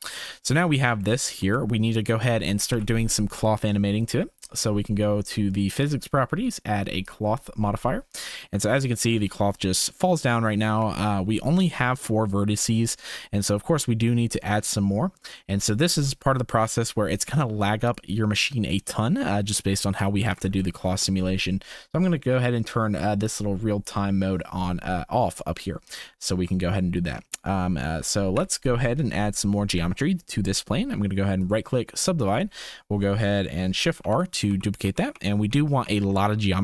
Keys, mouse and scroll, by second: 1.0 shift+click, 1.6 click, 2.2 shift+click, 2.7 ctrl+s, 7.0 click, 8.7 click, 9.1 space, 10.4 space, 10.7 Tab, 12.6 1, 16.6 Tab, 18.7 shift+right click, 19.7 shift+right drag, 20.3 ctrl+s, 20.5-20.9 shift+right drag, 23.2 click, 28.3 KP_1, 29.7 Tab, 34.0-36.2 typing.